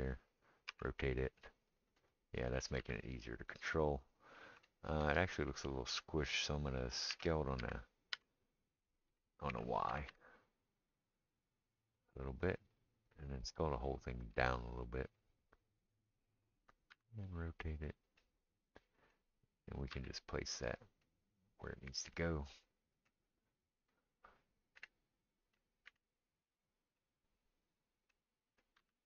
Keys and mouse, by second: 0.7 r, 2.8 g, 7.1 s, 9.5 s, 14.3 s, 16.9 r, 19.9 g, 24.7 KP_1, 25.9 KP_3, 28.8 g.